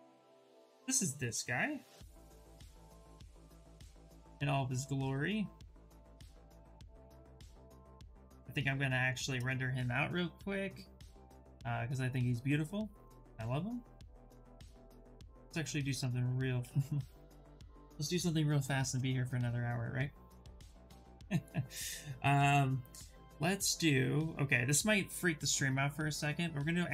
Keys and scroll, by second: 3.8 s, 11.1 s, 15.8 shift+f, 18.4 Return, 18.8 Return.